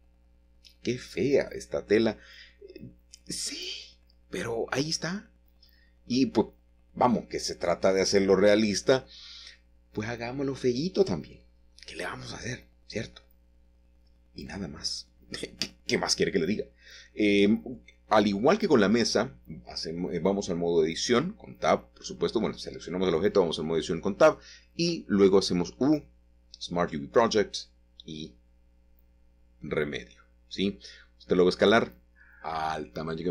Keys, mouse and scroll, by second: 1.2 click, 3.2 click, 6.1 click, 7.1-8.4 scroll down 2, 8.4 scroll down 1, 8.7 a, 11.3-12.8 shift+middle drag, 15.4-16.8 drag, 18.1 shift+middle click, 19.0 shift+middle click, 19.9-20.9 scroll up 2, 20.5-21.8 shift+middle drag, 22.5-23.8 scroll up 1, 22.9-24.4 shift+middle drag, 25.0 ctrl+middle click, 25.9 ctrl+shift+middle click, 27.2 shift+middle click, 28.1-29.0 scroll down 1, 29.0-30.2 middle drag, 30.4 a, 32.2 s.